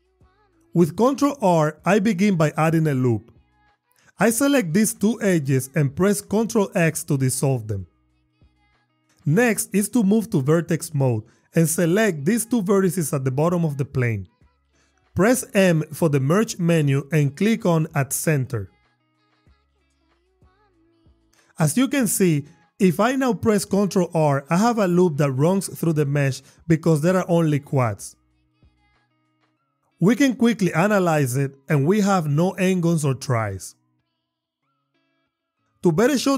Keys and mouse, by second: 0.2 ctrl+r, 1.3 click, 1.8 click, 5.0 click, 6.8 ctrl+x, 8.8 Tab, 10.8 click, 12.8 shift+click, 15.6 m, 24.4 ctrl+r, 27.1 click, 28.2 Tab, 28.7 drag, 29.7 click, 35.7 Tab.